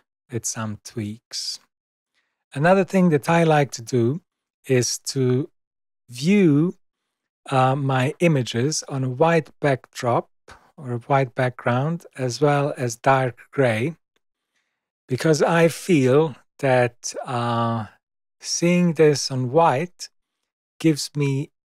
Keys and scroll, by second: 5.9 super+=.